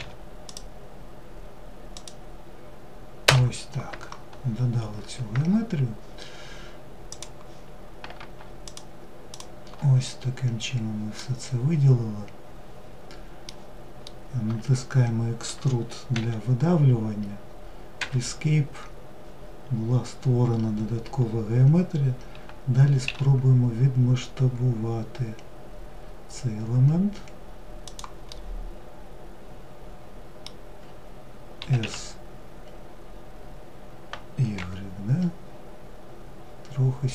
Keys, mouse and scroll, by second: 3.7-4.7 scroll down 2, 4.7-6.3 scroll down 5, 6.3-8.0 drag, 8.6 shift+click, 9.1-10.4 scroll down 7, 10.4-15.4 middle drag, 15.4 e, 19.0-19.5 scroll up 5, 20.4 scroll down 4, 22.3 s, 27.6-30.7 middle drag, 36.8-37.1 middle drag.